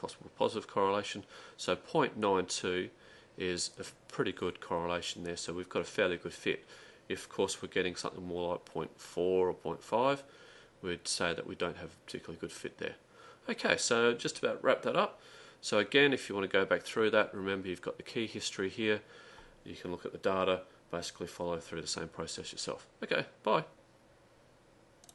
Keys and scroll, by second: 18.2 Delete.